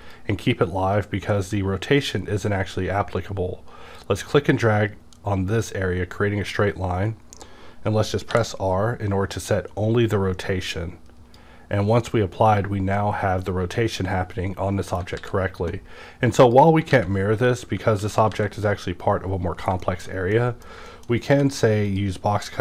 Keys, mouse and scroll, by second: 3.9 click, 4.0-15.2 drag, 8.3 r, 15.2 alt+x, 16.4 click, 16.9 alt+x, 17.1 click, 17.5 click, 18.0 ctrl+z, 19.8 middle click, 20.3 middle click, 20.9 shift+middle click, 21.3 d, 21.9 click.